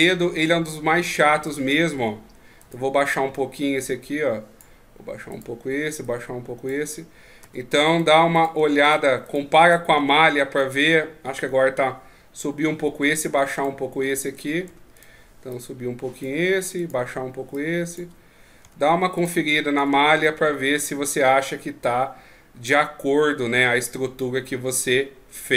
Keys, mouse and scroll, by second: 1.0 Tab, 1.5 right click, 2.0 Tab, 2.6 right click, 3.3 click, 5.3 right click, 6.0 click, 7.4 Tab, 7.8 right click, 8.3 right click, 9.0 right click, 9.2 right click, 9.6 right click, 10.0 Tab, 13.1 Tab, 13.5 right click, 14.7 Tab, 15.0 right click, 15.5 click, 16.7 right click, 17.5 click, 18.6 Tab, 19.2 right click, 19.8 Tab, 20.2 middle click.